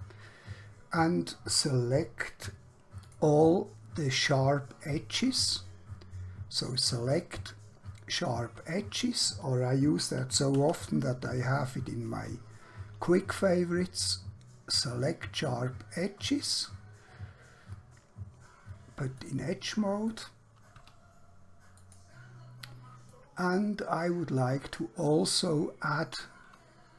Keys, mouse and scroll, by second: 3.1 click, 6.7 click, 10.7 q, 14.7 click, 19.1 click, 20.9 q, 21.7 click, 23.2 middle click, 25.7 scroll up 1.